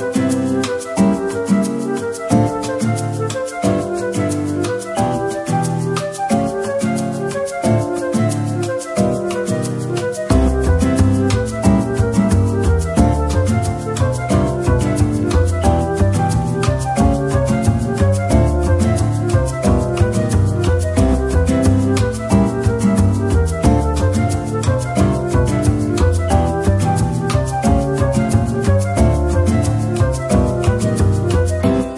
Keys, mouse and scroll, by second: 0.5 scroll up 1, 4.5-5.8 scroll down 1, 5.8 double click, 20.2 scroll down 1, 23.0 double click, 23.9 shift+click, 25.2 ctrl+j, 27.8 scroll down 1, 29.0 shift+click, 30.6 ctrl+j.